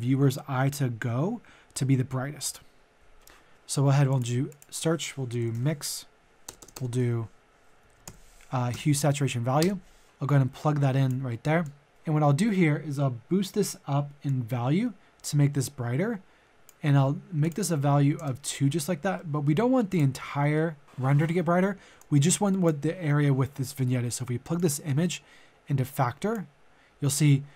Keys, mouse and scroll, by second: 4.1 click, 5.3-6.5 typing, 7.8-8.7 typing, 9.6 Return, 10.0-17.4 drag, 17.8 click, 18.1 Tab, 19.1 middle click, 19.9 click, 20.1 middle click, 21.9-27.5 drag.